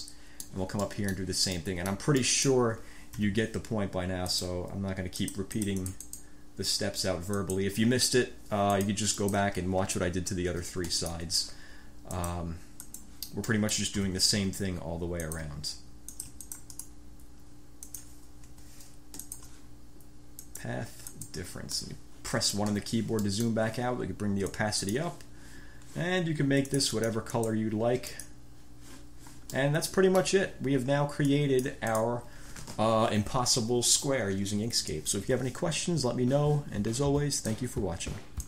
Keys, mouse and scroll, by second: 0.2 click, 1.0 click, 1.7 click, 2.4-2.8 drag, 3.3 b, 4.4 click, 5.3-6.5 drag, 7.5 click, 8.8-9.4 scroll up 3, 9.4 click, 11.2 shift+click, 12.3 click, 13.0 click, 13.6-14.0 drag, 14.1 b, 15.4 ctrl+click, 16.3-17.2 ctrl+drag, 18.0 click, 18.7 F1, 19.4 shift+click, 20.6 click, 21.3 click, 22.0 click, 22.2-22.9 drag, 22.9 1, 23.4-23.8 drag, 24.7 click, 26.9-27.4 drag, 27.6 click, 28.3 click, 29.7 click, 31.4 ctrl+click.